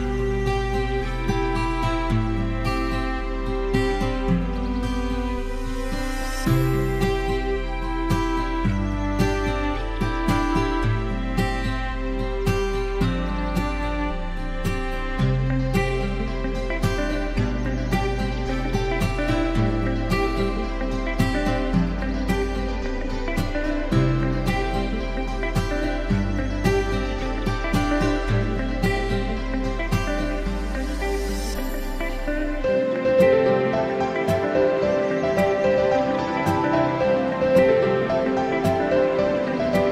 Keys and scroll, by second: 23.3 ctrl+™, 24.7 ctrl+?, 26.9 ctrl+0, 28.1 ctrl+j, 28.4 ctrl+?, 29.0 ctrl+~, 29.7 ctrl+?, 30.1 ctrl+™, 30.3 ctrl+¡, 37.3 ctrl+shift+j.